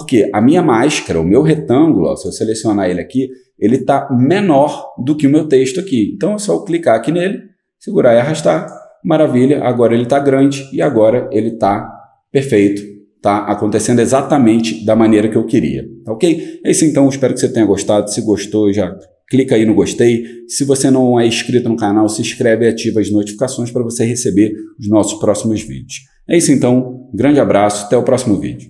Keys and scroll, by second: 11.6 0.